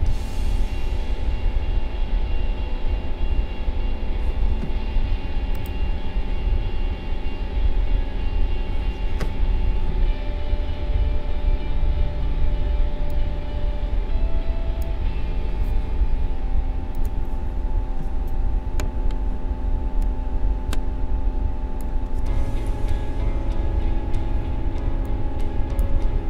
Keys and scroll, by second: 22.8 ctrl+=, 24.7 space.